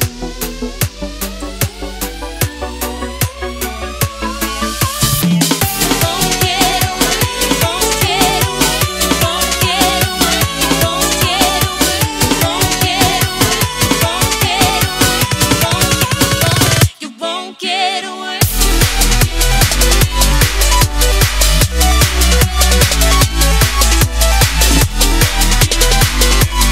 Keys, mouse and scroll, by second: 0.1 0, 1.8 ctrl+Num_Lock, 2.0 ctrl+s, 2.7-4.3 scroll up 1, 4.6 click, 9.0 click, 11.9 ctrl+shift+s, 13.4 click, 19.0 ctrl+z, 20.0 click, 21.0 ctrl+s, 24.0 click.